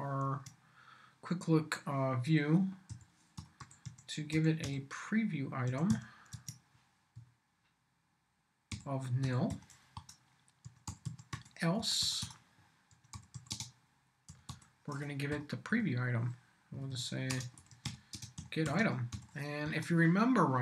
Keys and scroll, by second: 0.2 shift+Tab, 2.6-7.1 typing, 8.7-15.0 typing, 15.3 Up, 16.8-19.6 typing, 19.6 Return.